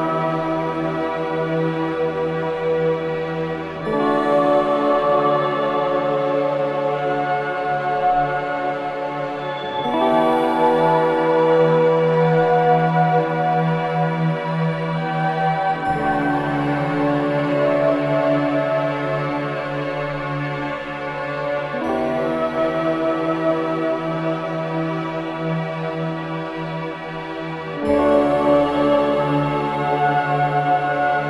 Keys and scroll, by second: 20.2 ctrl+alt+d, 20.9 ctrl+space, 22.1 KP_0, 22.5 c, 23.9 b, 24.2 b, 24.8 v, 27.7 shift+x, 28.3 x, 28.7 space, 29.3 v.